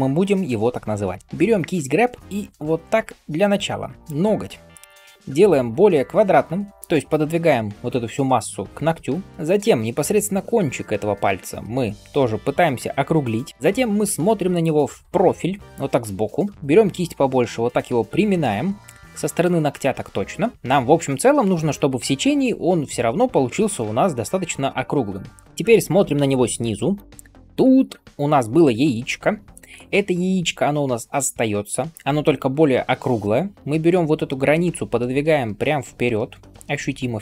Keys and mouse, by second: 1.2-37.2 drag, 1.2 ], 16.5 ], 26.5 ctrl+KP_7.